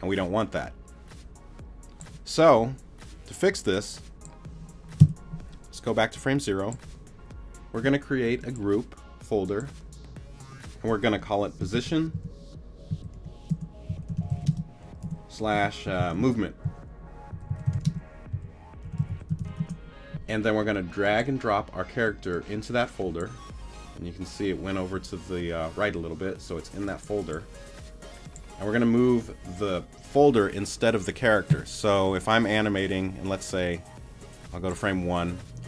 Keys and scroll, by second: 5.0 BackSpace, 11.7-19.9 typing.